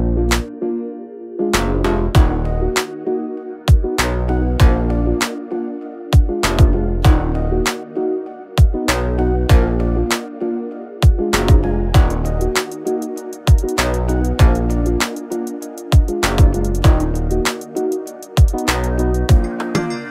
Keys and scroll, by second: 0.9-3.1 typing, 9.0 space, 12.7 r, 15.0-17.4 typing, 19.8 space.